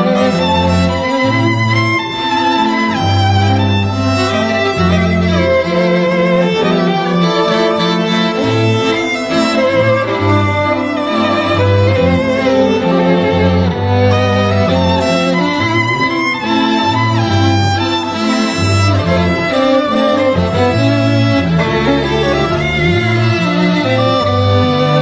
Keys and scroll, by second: 0.6 [, 0.9 [.